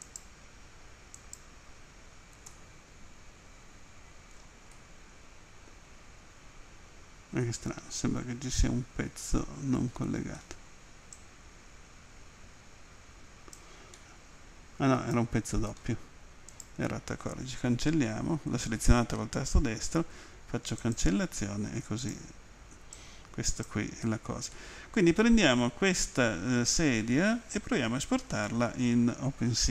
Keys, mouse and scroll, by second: 0.1 right click, 1.2 right click, 2.5 middle click, 4.7 middle click, 8.2 middle click, 9.2 middle click, 11.2 click, 14.0 middle click, 14.9 middle click, 15.7 middle click, 16.7 right click, 20.0 Delete, 20.8 click, 22.0 right click, 23.0 click, 24.6 middle click.